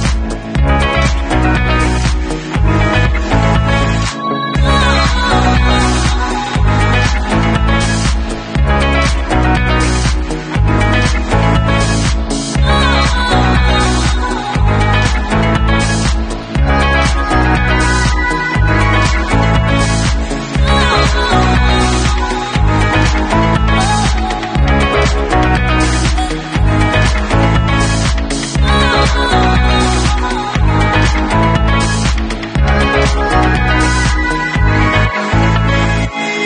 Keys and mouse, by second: 0.1-2.4 drag, 2.1 w, 2.7-5.5 alt+drag, 5.5-6.5 middle drag, 6.5-9.2 alt+drag, 9.2-11.5 middle drag, 11.5-36.4 drag.